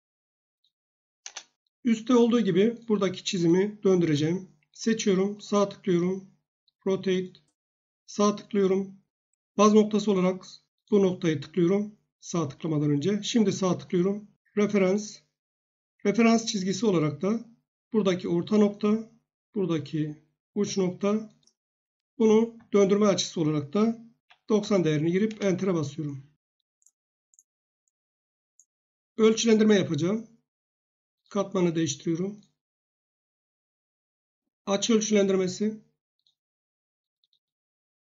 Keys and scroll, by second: 1.2 Return, 23.9-25.1 typing, 25.3 Return.